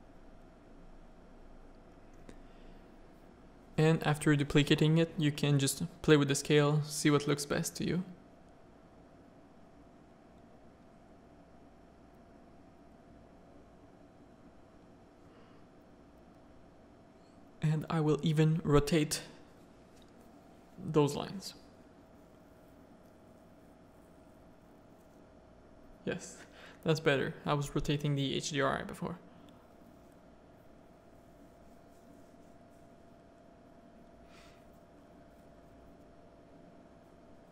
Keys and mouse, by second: 0.2 click, 2.0-7.3 drag, 10.5 middle click, 11.7 middle click, 12.1 shift+middle drag, 12.3 shift+click, 12.6 z, 15.2 click, 16.4 click, 17.6-18.8 drag, 19.0 click, 20.3 middle click, 21.3 middle click, 23.4-23.9 drag, 24.4 click, 24.7 middle click, 25.7-26.8 drag, 27.0-28.7 drag, 30.4 click, 31.6 ctrl+click, 35.5 middle click.